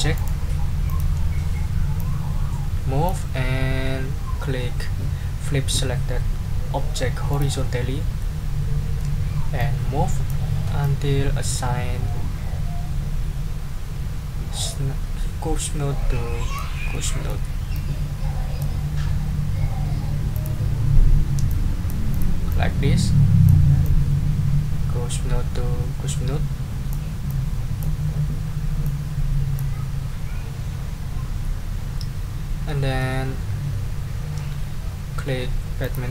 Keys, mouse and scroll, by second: 0.1 right click, 0.9 click, 2.0-3.2 ctrl+drag, 7.3 click, 8.2 middle click, 9.6 click, 10.8-16.7 drag, 16.9 middle click, 17.7-18.8 drag, 20.3 click, 21.5 click, 22.2 click, 22.5-23.6 drag, 23.8-27.1 drag, 27.3 click, 28.8 click, 32.6 middle click, 35.8 click.